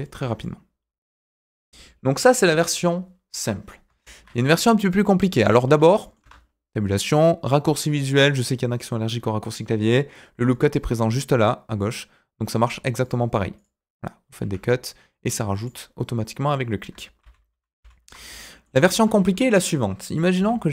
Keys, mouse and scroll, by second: 0.0 middle click, 0.1 Tab, 0.4-1.4 middle drag, 2.3 Delete, 4.0 shift+a, 5.6-6.0 scroll up 2, 6.0 middle click, 6.2 Tab, 6.3-9.2 scroll down 2, 10.4 click, 12.4 click, 13.0 click, 13.5 click, 14.4 Escape, 15.5 click, 17.2 ctrl+z, 17.5 ctrl+z, 17.8 ctrl+z, 18.2 Tab, 18.4 middle click, 19.3 KP_1, 20.3 r.